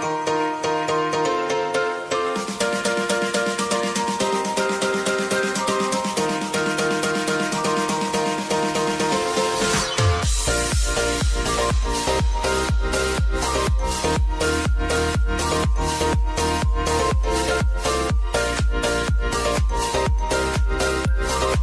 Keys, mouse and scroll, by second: 4.4 click, 6.8-11.0 drag, 11.0-12.3 scroll down 1, 12.3-21.6 drag.